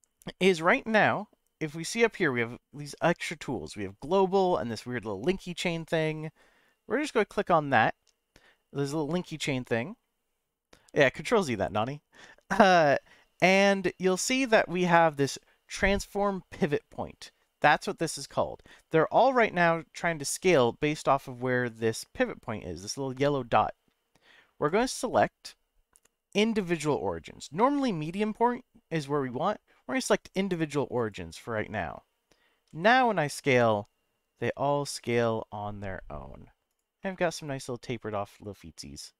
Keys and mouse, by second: 7.5-20.1 drag, 24.6-31.1 drag, 31.6 middle click, 32.7 s, 36.7 click, 37.0-39.1 middle drag.